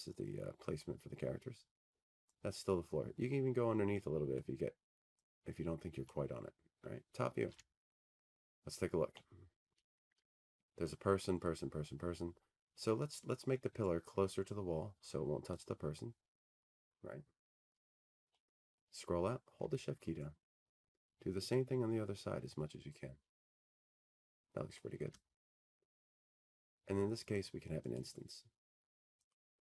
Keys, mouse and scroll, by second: 3.0 click, 9.9 click, 11.7 click, 13.1 t, 13.8-14.4 scroll, 15.5-16.6 scroll, 21.1 click, 21.7-23.1 scroll, 23.3-24.0 scroll, 24.4-25.0 scroll.